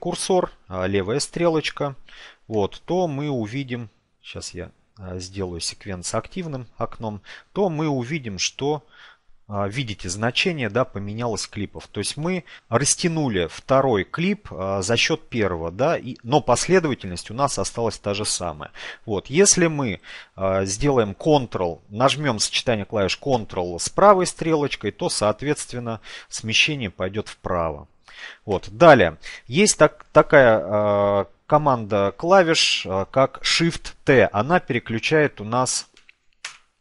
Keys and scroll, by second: 21.7 ctrl+Right, 32.6 shift+t.